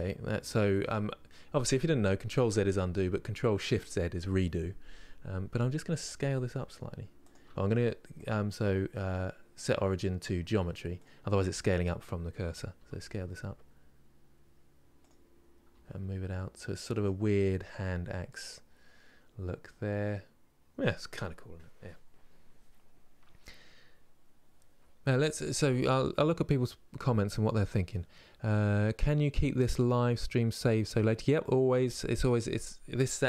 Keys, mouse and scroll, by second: 5.6 s, 10.7-12.5 right drag, 12.5 s, 17.3-20.5 middle drag.